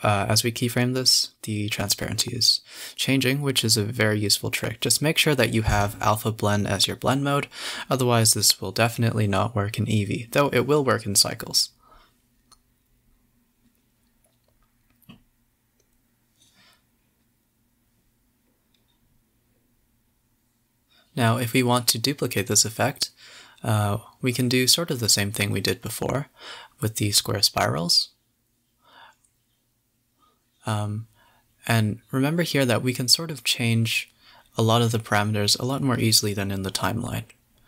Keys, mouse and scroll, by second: 1.1 click, 2.3 Left, 2.4 Left, 2.6 Left, 2.7 Left, 2.8 Left, 3.1 Left, 4.9 alt+i, 5.8-6.3 Left, 6.5 Right, 6.8 Left, 6.9 Left, 8.0-9.0 drag, 9.0 Left, 9.1 Left, 9.3 Left, 10.6-12.7 drag, 12.7 i, 13.1 space, 18.5 click, 19.3 click, 19.9-20.4 scroll up 8, 20.5 KP_7, 21.0 scroll up 4, 21.6 space, 22.0 click, 22.4 click, 23.8 click, 24.4-24.7 scroll up 4, 26.9 click, 27.6-30.8 typing, 30.6 click, 32.6-33.1 drag, 33.6 click, 34.4 space, 35.8 space, 36.0 g, 36.6 space.